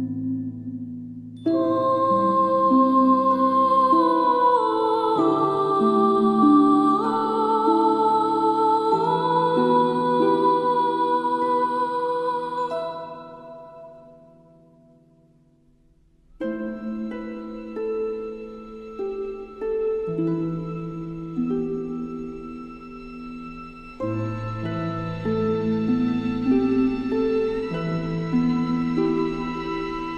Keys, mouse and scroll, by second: 0.7 alt+scroll up 1, 1.4 click, 1.8 alt+scroll down 1, 2.1 space, 2.2 click, 4.6 shift+click, 5.0 shift+click, 11.1 space, 11.2-12.2 drag.